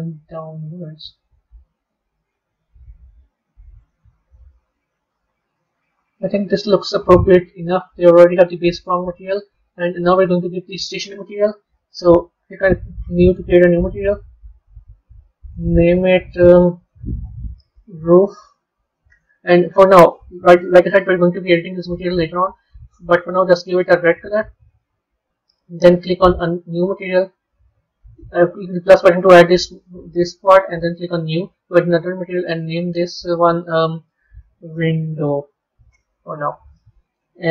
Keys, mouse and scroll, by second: 1.7 g, 5.5-10.0 middle drag, 10.0 click, 12.2-15.4 drag, 15.6-18.1 drag, 18.1 o, 22.2 click, 26.4-29.6 drag, 30.9-32.5 drag, 32.6-35.7 drag.